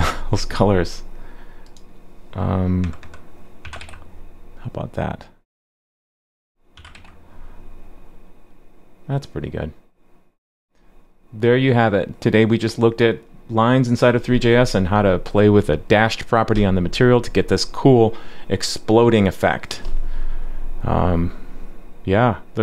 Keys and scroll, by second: 3.8 super+s, 6.9 super+s.